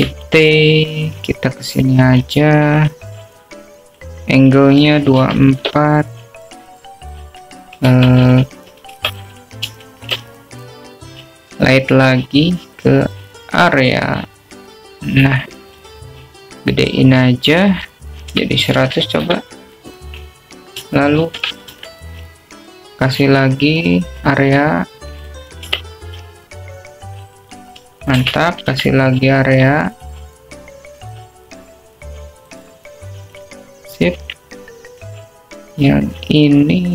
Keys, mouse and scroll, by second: 0.6 ctrl+z, 0.8-1.8 drag, 2.0 shift+t, 4.9 click, 6.1-8.4 drag, 10.4 click, 11.0 `, 11.9 shift+a, 16.0-17.4 drag, 17.9 s, 20.0-21.6 drag, 21.1 0, 23.7 shift+d, 25.5-27.5 drag, 27.8 g, 30.5 shift+d, 33.4-35.6 drag, 35.8 middle click, 35.8-36.4 alt+drag, 36.4 middle drag.